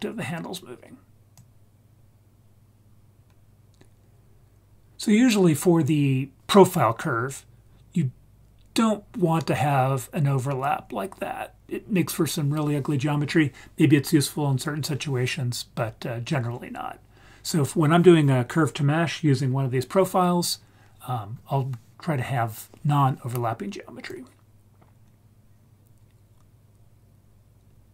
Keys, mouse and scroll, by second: 1.4-10.7 drag, 24.1-27.9 drag.